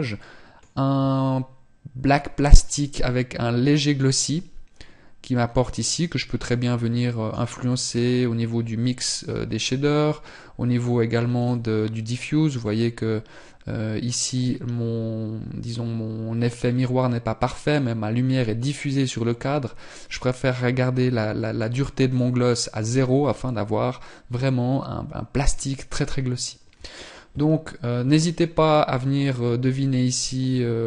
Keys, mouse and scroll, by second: 8.9 middle click.